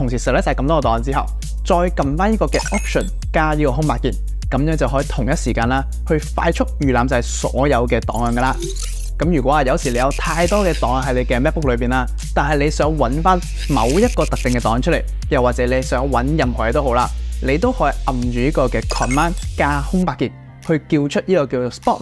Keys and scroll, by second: 4.3 alt+space, 20.1 super+space.